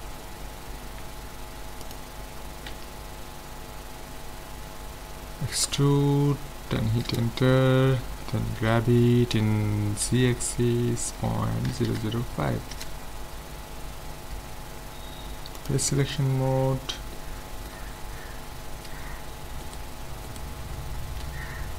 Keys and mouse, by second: 0.8 ctrl+Tab, 2.7 a, 5.7 e, 8.6 g, 15.6-17.1 drag, 17.1-18.9 middle drag, 19.6-21.7 right drag, 21.2 a.